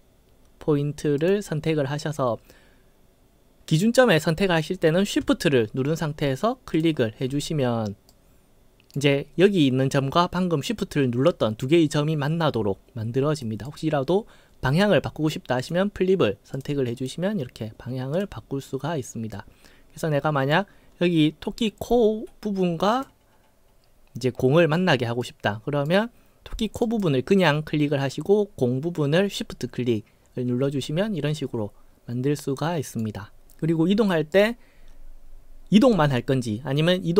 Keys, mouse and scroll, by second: 1.2 click, 6.7 shift+click, 8.1-8.9 right drag, 13.4 right click, 15.6 click, 16.5 click, 17.0 click, 18.1 click, 19.3-20.5 right drag, 22.9 click, 25.2-25.9 right drag, 26.8 click, 30.9-33.0 right drag, 34.3 click, 34.3 right click.